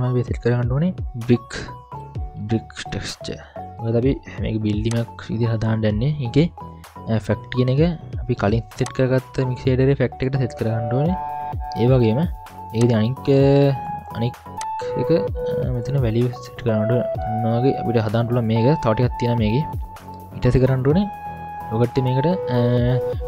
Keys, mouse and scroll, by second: 0.2 middle click, 0.2-1.0 scroll down 2, 1.0 ctrl+alt+a, 8.8-10.3 drag, 13.0 click, 14.6-15.9 drag, 17.7-18.2 scroll down 2, 18.2-18.8 middle drag, 19.5-20.3 middle drag, 19.5-20.2 scroll up 3, 21.5-22.4 scroll down 2, 21.9 middle click.